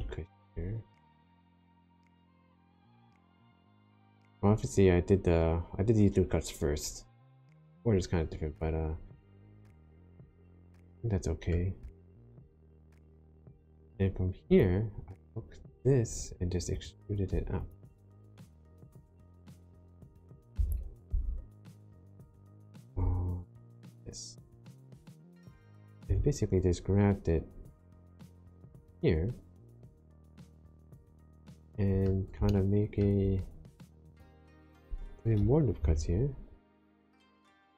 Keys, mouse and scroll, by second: 1.9 right click, 2.8 click, 7.3 middle click, 9.2 scroll up 2, 9.7 shift+middle click, 10.8 middle click, 12.0 shift+middle click, 13.5 click, 14.4 click, 16.1 3, 16.7 click, 17.5 shift+click, 19.5 middle click, 20.5 e, 21.1 z, 22.9 z, 25.6 click, 26.0 g, 29.6 click, 30.4 middle click, 32.4 shift+middle click, 33.4-34.5 scroll up 2, 35.7 ctrl+r.